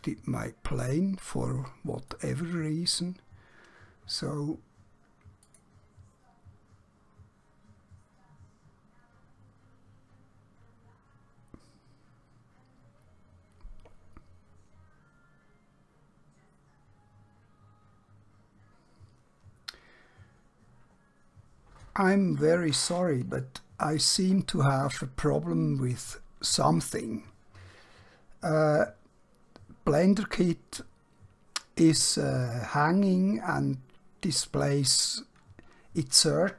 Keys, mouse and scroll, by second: 2.1 click, 5.6 click.